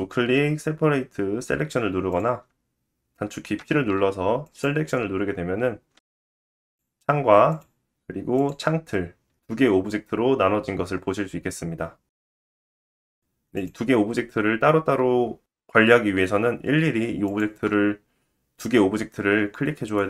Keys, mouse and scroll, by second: 6.5 Tab, 10.3 g, 17.3 shift+click, 19.2 g.